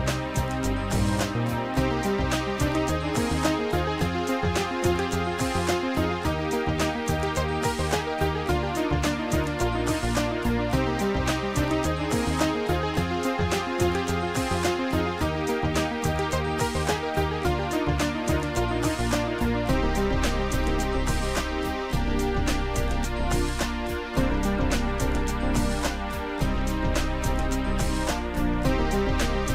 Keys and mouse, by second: 0.1 click, 1.5 click, 2.0 click, 3.1 click, 4.2 click, 8.9 click, 14.5 click, 18.9 click, 21.0 click, 25.3 click, 26.2 click, 28.4 right click.